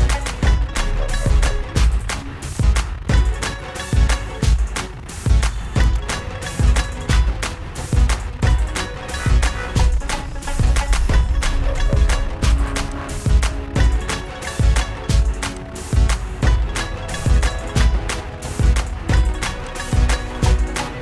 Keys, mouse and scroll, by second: 2.9 click, 5.9 Caps_Lock, 7.8-11.1 typing, 13.2-16.0 drag, 16.2 click, 17.7 shift+click, 20.0 click, 20.1 click.